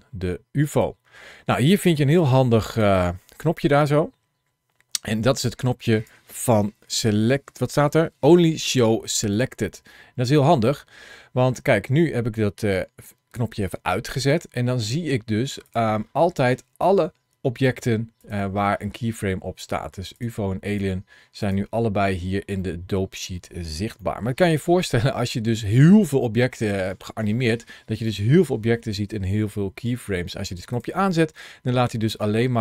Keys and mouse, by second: 0.6 click, 2.4 ctrl+shift+a, 15.5 click, 18.0 click, 20.5 click, 21.3 click, 22.5 middle click, 23.9 shift+middle click, 24.3 middle click, 25.5 shift+middle click, 26.9 shift+middle click, 27.3 middle click, 32.0 click.